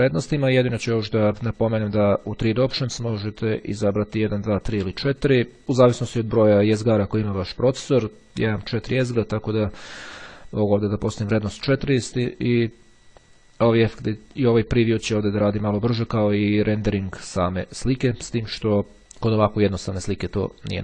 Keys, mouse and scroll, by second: 2.9 click, 4.3 click, 5.2 click, 14.2 click, 17.4 click, 19.2 click, 20.1 click.